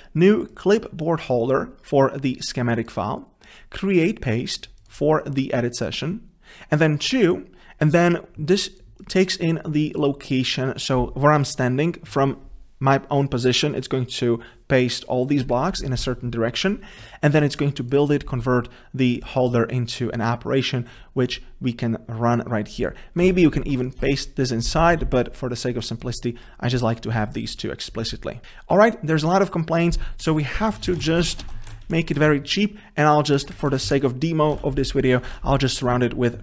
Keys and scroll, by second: 23.4 ctrl+c, 25.0 ctrl+v, 34.7 ctrl+v.